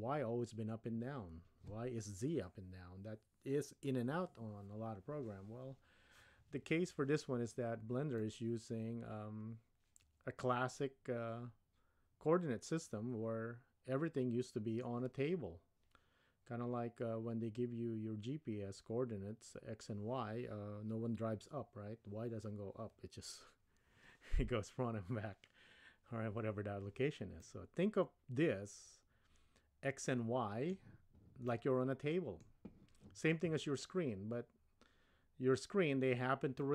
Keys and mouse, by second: 8.2-15.6 middle drag, 27.4-30.8 middle drag, 31.5-32.5 middle drag, 36.6-36.7 middle drag.